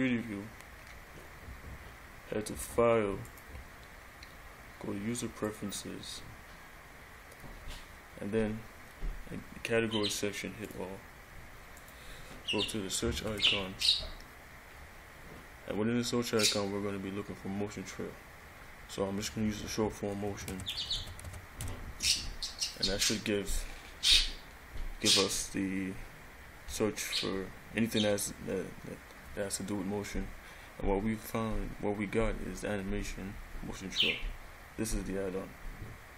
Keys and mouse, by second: 3.4 click.